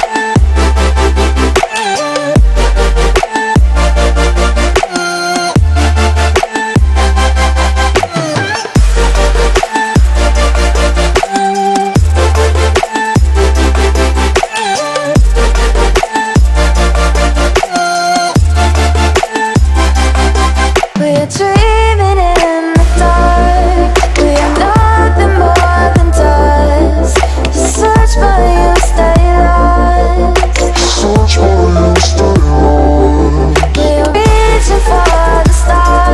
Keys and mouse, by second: 0.4 click, 0.6 space, 1.5 space, 1.6 click, 1.8 space, 2.4-3.2 click, 3.7 space, 4.1-5.0 drag, 5.9 ctrl+-, 6.9 space, 8.9 space, 9.0 click, 9.2 space, 9.5 click, 11.8 click, 17.1 click, 19.3-19.9 drag, 27.7 Down, 28.6 click, 30.3-32.9 drag, 35.1 space, 35.3 click.